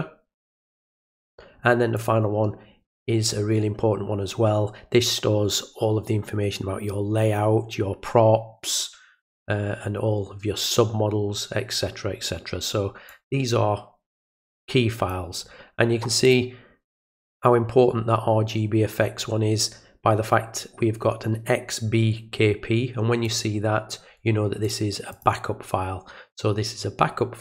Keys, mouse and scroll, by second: 2.0 click, 13.1-15.1 drag, 16.3 click, 23.3 click, 24.6 click, 25.1 click.